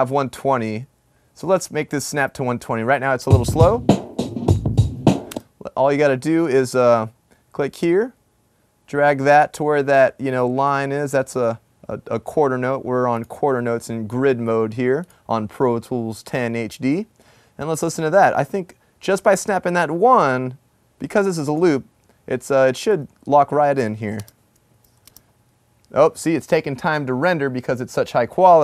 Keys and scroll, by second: 1.1 typing, 22.9 typing.